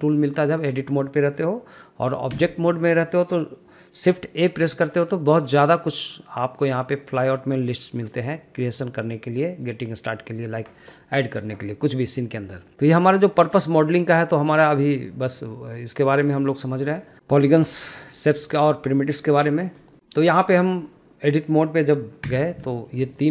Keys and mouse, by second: 1.1 middle click, 2.6 Tab, 3.1 middle click, 4.8 shift+a, 17.1 shift+middle click, 17.5 shift+middle click, 18.0 shift+middle click, 19.7 shift+middle click, 20.9 shift+middle click, 22.6 Tab, 23.0 middle click.